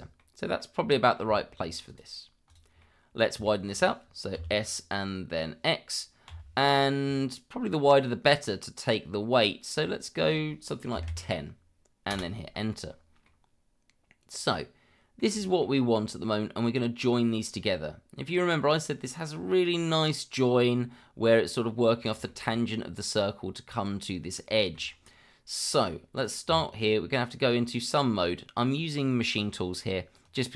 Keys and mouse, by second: 0.2-0.6 middle drag, 0.9 middle drag, 1.3 shift+middle drag, 1.8 click, 2.5 click, 2.8-3.2 middle drag, 3.4 shift+middle drag, 4.3 s, 6.3 x, 10.9 KP_1, 11.0 KP_0, 12.1 Return, 13.2-15.2 middle drag, 15.4 shift+middle drag, 17.0 click, 17.5-18.3 middle drag, 22.3 shift+middle drag, 24.6 shift+middle drag, 25.7 middle drag, 26.1 click, 26.5 Tab.